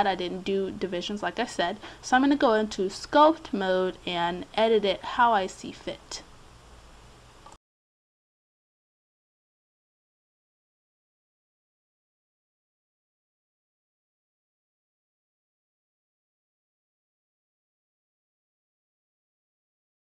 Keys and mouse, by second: 0.1 click, 3.6 middle click, 5.0-8.5 drag, 7.7-9.3 middle drag, 9.3 click, 10.0 middle click, 11.8 d, 12.2 click, 12.7 middle click, 13.5 click, 14.7 middle click, 16.6 middle click, 18.1 middle click, 19.1 middle click, 19.9 click.